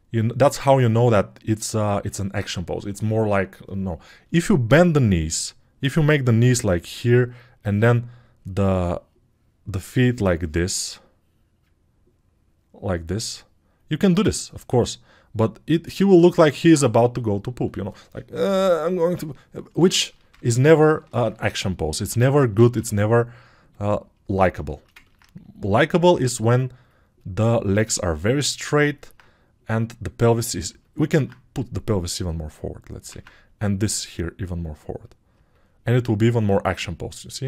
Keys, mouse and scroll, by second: 31.2 alt+q, 33.2 alt+q.